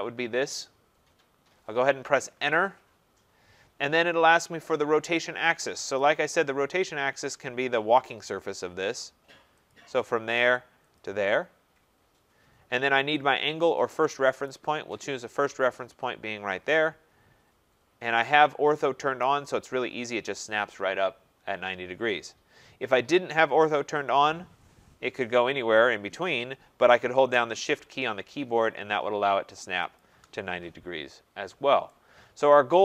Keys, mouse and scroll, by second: 2.4 Return, 9.7 click, 11.0 click, 14.5 right click, 16.9 click, 19.2 right click, 24.1 click, 30.0 shift+click.